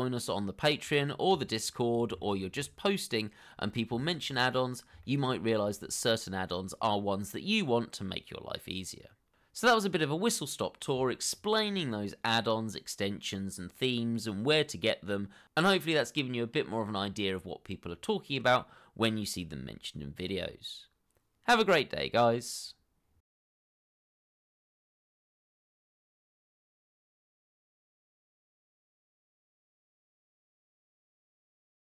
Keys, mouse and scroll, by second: 12.6 middle click, 13.4 scroll down 1, 13.7 shift+middle click, 14.5 middle click, 15.6 shift+middle click, 15.9 scroll up 1, 16.5 shift+middle click.